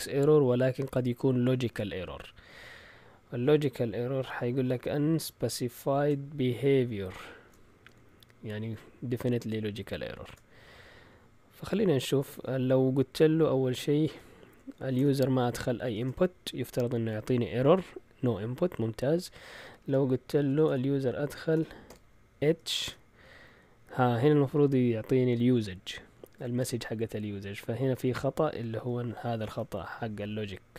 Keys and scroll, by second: 10.1 shift+super+z, 13.8-15.0 typing, 16.0 Return, 19.8-22.0 typing, 22.8 Return.